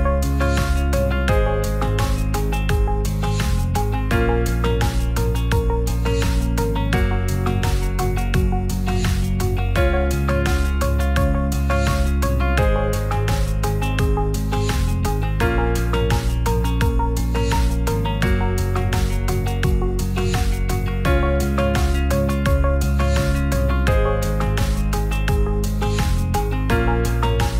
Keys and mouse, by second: 0.8 ctrl+middle click, 1.6 ctrl+middle click, 2.4 middle click, 10.5 click, 13.5 click, 14.0 Tab, 19.4 ctrl+click, 21.2 click, 24.5 click, 26.2 Tab.